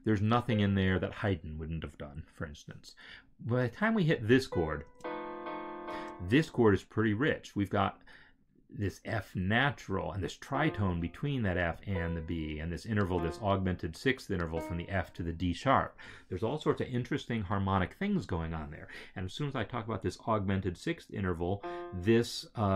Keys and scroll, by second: 4.8 space, 10.3 space.